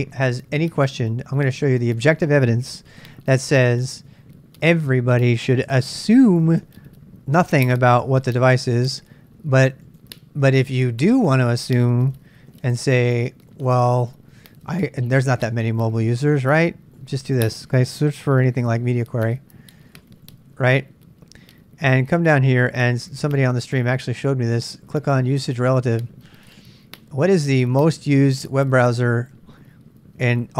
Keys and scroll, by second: 2.6-4.1 typing, 4.7 super+Tab, 5.6 super+Tab, 12.4-13.4 typing, 13.6 Return, 18.8-20.7 typing.